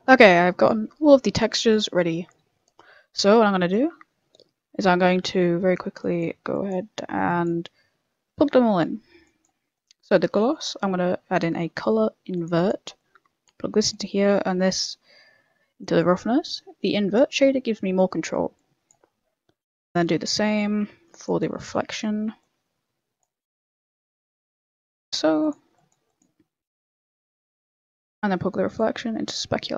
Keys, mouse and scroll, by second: 1.1 scroll up 2, 1.3 middle click, 3.3 click, 4.0 scroll up 2, 4.2 middle click, 5.0-5.5 scroll up 4, 5.5 middle click, 6.0 click, 6.5 click, 6.8 middle click, 7.2 click, 7.8-8.4 scroll down 3, 8.3 middle click, 8.8 middle click, 9.2 click, 9.6 scroll down 2, 9.7 middle click, 10.1-10.5 scroll up 7, 10.6 shift+a, 12.9 click, 13.9 click, 17.4 click, 17.4-17.7 scroll down 7, 18.5 click, 19.0-19.4 scroll up 6, 19.3 middle click, 19.5 shift+a, 21.1 click, 21.6 shift+d, 22.4 click, 23.6 click, 24.1 click, 24.1 middle click, 24.8 click, 25.4 click, 26.0 click, 26.6 click, 26.9 click, 27.6 click, 28.1 middle click, 28.7 click.